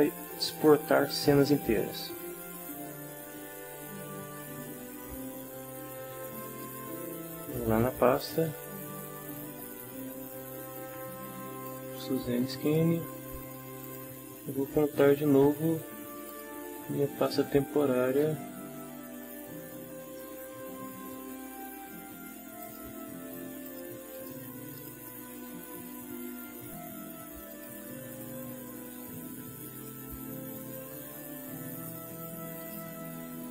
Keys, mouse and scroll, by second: 2.5 click, 6.4 click, 8.2 click, 11.7 click, 12.7 click, 13.8 click, 16.3 click, 22.6 click, 23.7 click, 24.1 click, 24.8 click, 27.5 click, 29.7 click, 32.6 click.